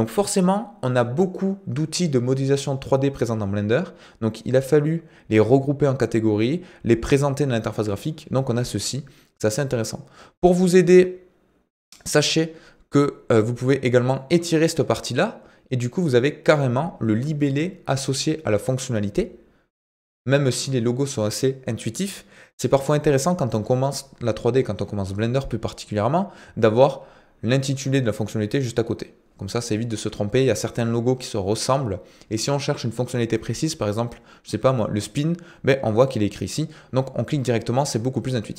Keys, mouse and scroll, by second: 14.2-16.3 drag.